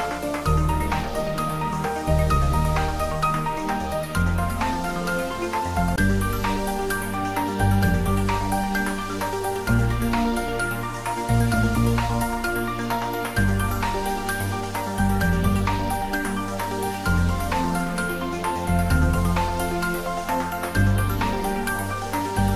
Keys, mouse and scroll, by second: 1.6 click.